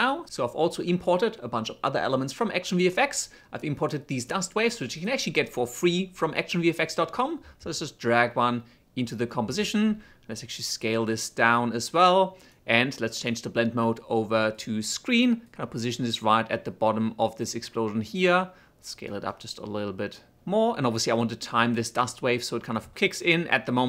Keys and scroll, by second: 10.1 s.